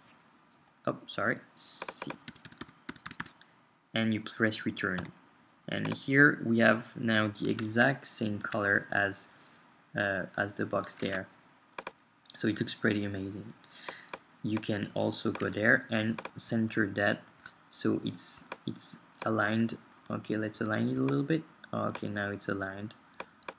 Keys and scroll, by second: 0.0-0.5 typing, 2.3 typing, 4.3 typing, 5.0 Return, 7.7 super+Tab, 11.1 super+Tab, 16.7 shift+Down, 20.6 Down.